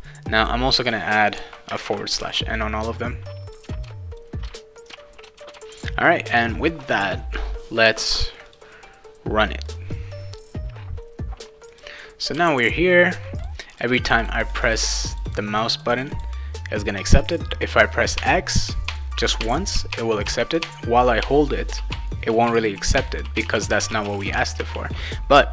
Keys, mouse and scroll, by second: 0.4 click, 1.7 space, 1.8 \, 2.2 n, 3.4 click, 3.7 ctrl+c, 3.8 click, 3.8 ctrl+v, 4.1 click, 4.4 ctrl+v, 4.8 click, 5.2 BackSpace, 5.4 ctrl+v, 5.5 ctrl+s, 8.4 click, 9.7 click, 11.7 click, 12.3 a, 13.4 click, 13.7 click, 13.9 click, 14.0 click, 14.2 click, 14.3 click, 14.5 click, 14.6 click, 14.8 click, 14.9 click, 15.1 click, 15.2 click, 15.7 click, 15.9 click, 16.1 click, 18.1-24.6 typing.